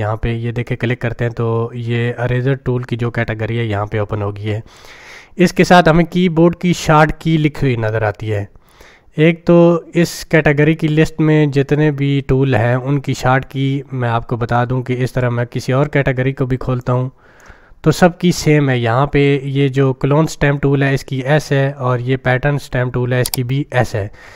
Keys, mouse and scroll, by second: 16.8-17.4 drag.